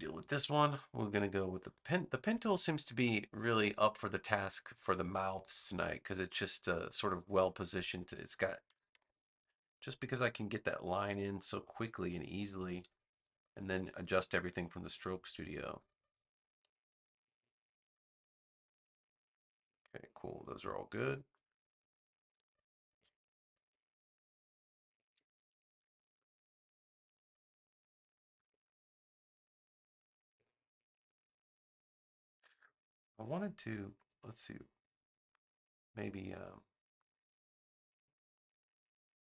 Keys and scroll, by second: 8.6 9, 8.8 Return, 13.6 a, 14.6 a, 22.3 a.